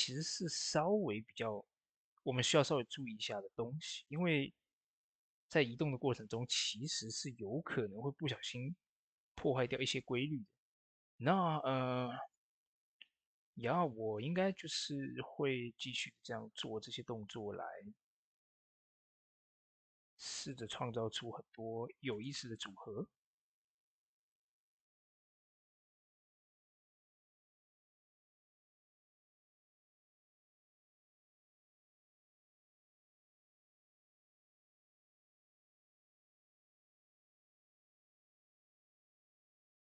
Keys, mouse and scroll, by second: 6.6 s, 9.0 click, 9.5 ctrl+a, 9.7 click, 11.4 ctrl+s, 17.0 ctrl+s, 17.1 click, 20.4 shift+click, 21.3 shift+d, 22.0 right click, 22.4-26.1 drag, 26.6 middle click, 28.2-39.8 drag.